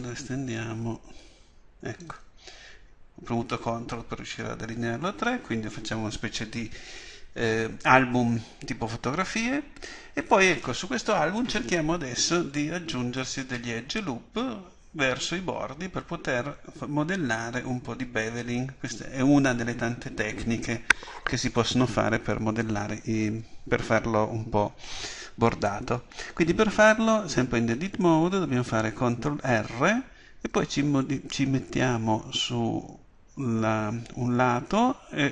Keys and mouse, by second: 0.2-2.0 drag, 29.4 ctrl+r.